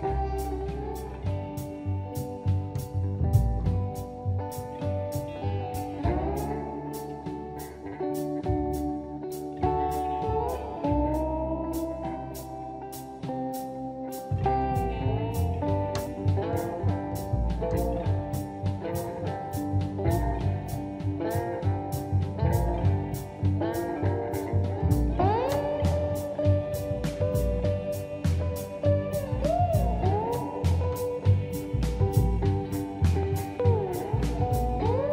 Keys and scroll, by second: 14.5 m, 19.3 space.